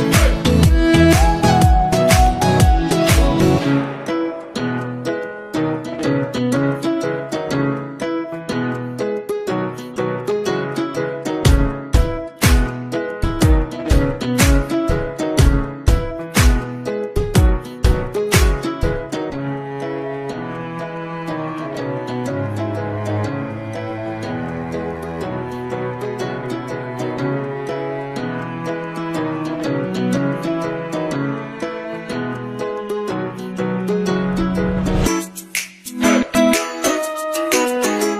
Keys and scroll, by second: 6.0 ctrl+z, 17.6 ctrl+z, 33.1 ctrl+z.